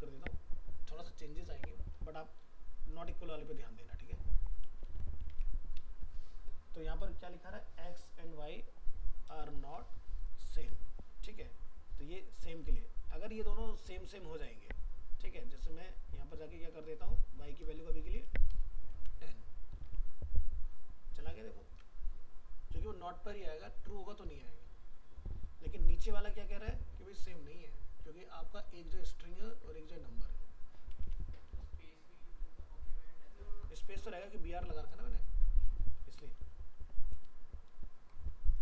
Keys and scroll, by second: 4.8 ctrl+s, 5.3 alt+Tab, 9.7 alt+Tab, 10.5 ctrl+s, 18.9 ctrl+s, 19.9 alt+Tab, 31.0 alt+Tab, 35.9 ctrl+z.